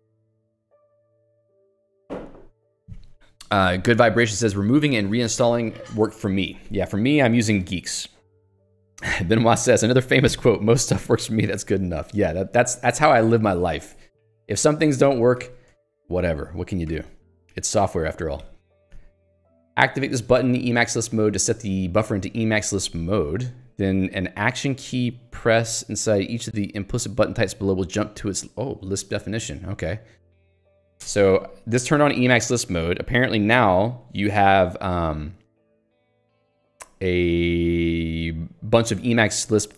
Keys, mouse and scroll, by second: 12.3 Escape, 13.0 j, 13.9 Escape, 14.2 j, 16.0 Escape, 16.9 j, 19.2 k, 20.7 l, 24.0 h, 30.2 j, 30.5 k, 31.2 alt+Return, 32.3 j, 37.6 k, 38.8 h.